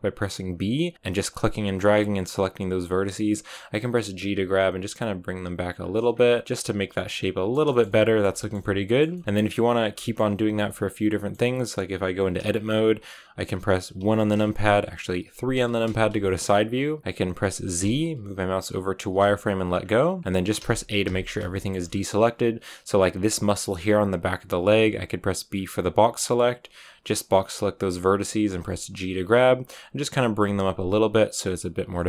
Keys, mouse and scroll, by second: 2.0-4.1 scroll up 3, 4.1 g, 6.0 scroll down 2, 6.2-7.4 shift+middle drag, 7.4 scroll down 2, 7.6-10.3 shift+middle drag, 10.3 Tab, 10.5-13.9 middle drag, 13.9 KP_1, 15.4 KP_3, 16.1 shift+middle click, 16.4 scroll up 2, 19.7 scroll down 1, 20.1 a, 20.5 a, 20.9 a, 21.4 shift+middle click, 21.6-27.3 scroll up 3, 27.3 b, 28.4 g, 31.9-32.0 shift+middle drag.